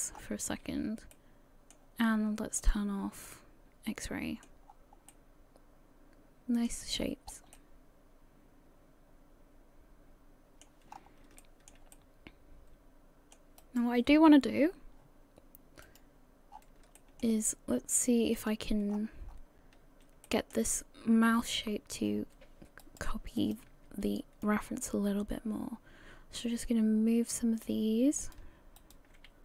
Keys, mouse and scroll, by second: 0.2-0.5 scroll up 3, 0.5 a, 0.8 a, 1.1 middle click, 2.6 click, 3.3 middle click, 4.7-5.1 scroll down 4, 5.1 middle click, 7.0 scroll up 1, 7.5 middle click, 10.9-11.4 scroll up 3, 11.4 shift+middle click, 11.9 middle click, 13.6 right click.